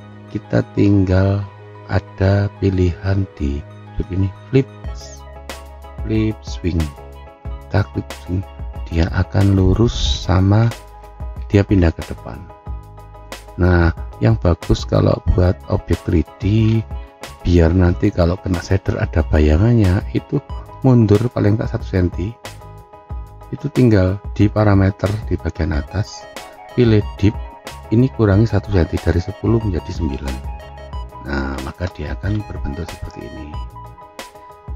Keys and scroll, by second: 29.9 9, 30.8 Return.